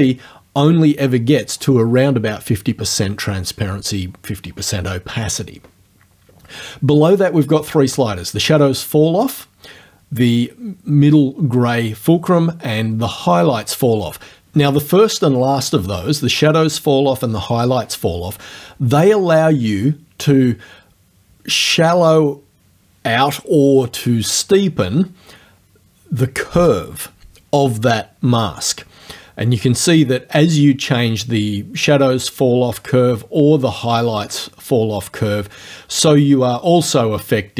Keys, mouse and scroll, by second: 19.4-33.1 drag, 33.7-37.5 drag.